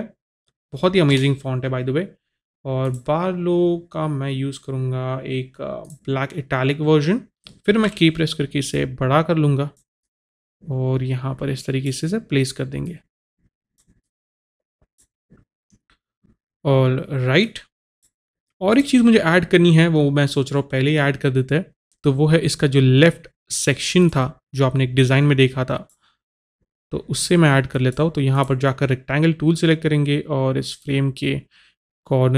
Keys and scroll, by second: 0.8-1.6 typing, 2.9 Return, 8.0 k.